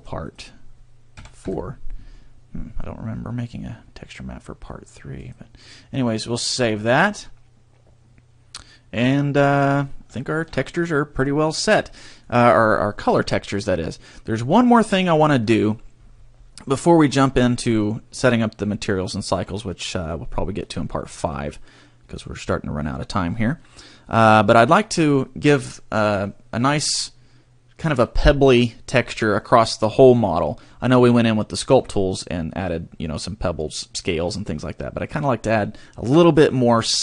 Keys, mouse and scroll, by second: 7.8 click, 8.6 middle click, 10.1 shift+middle click, 10.5 middle click, 11.8 middle click, 11.9 shift+middle click, 23.5 middle click.